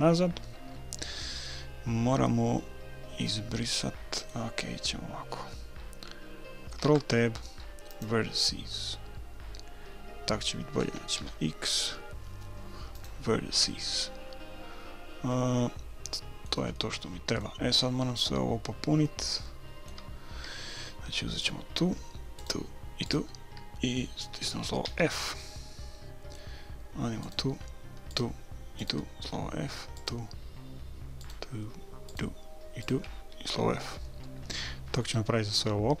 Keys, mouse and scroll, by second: 3.2-5.1 middle drag, 6.9 ctrl+Tab, 11.2 x, 14.0-15.8 middle drag, 16.8-20.9 middle drag, 21.4-24.9 right drag, 24.9 f, 25.3-27.2 middle drag, 27.2-34.2 right drag, 29.2 f, 33.5 f, 34.2-36.0 middle drag.